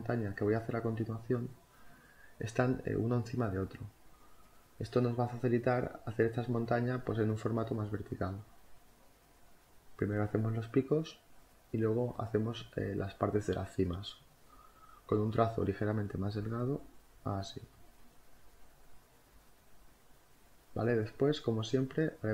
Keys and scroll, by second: 0.9 space, 5.5 e, 6.2 b, 7.9 space, 8.4 [, 17.3-18.2 typing, 21.6 ctrl+z, 21.8 ctrl+z.